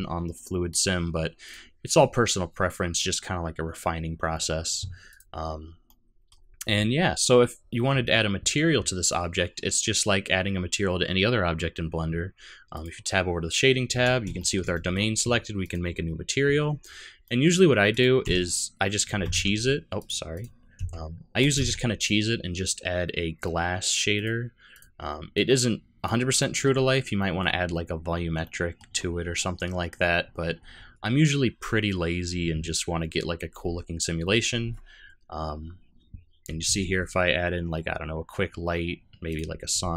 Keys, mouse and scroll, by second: 0.7 click, 5.1 click, 5.8 middle click.